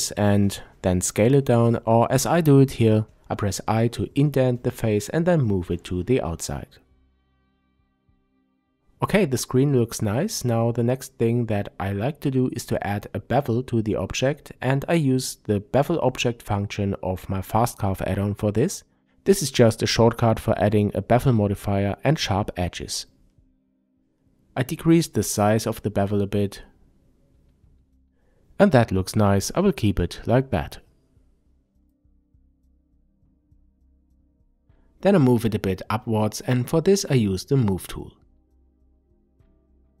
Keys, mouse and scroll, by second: 0.7 Tab, 1.6-16.0 middle drag, 12.2 n, 16.0 click, 17.8-21.2 middle drag, 19.1-21.2 scroll up 2, 21.2-27.3 drag, 24.7 Return, 27.2 scroll up 2, 27.3-34.5 middle drag, 29.6-32.3 scroll down 2, 32.3 n, 33.0 s, 34.5 click, 35.7-37.0 drag, 37.0-39.2 middle drag, 39.2-40.0 drag.